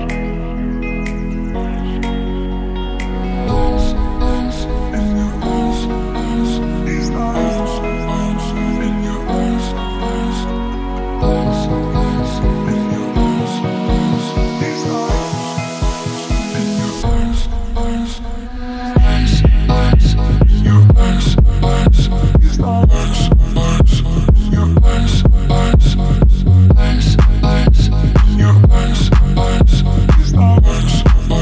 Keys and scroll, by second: 11.0 ctrl+t, 17.1 Left, 19.9 ctrl+t, 29.4 Left, 31.1 Up.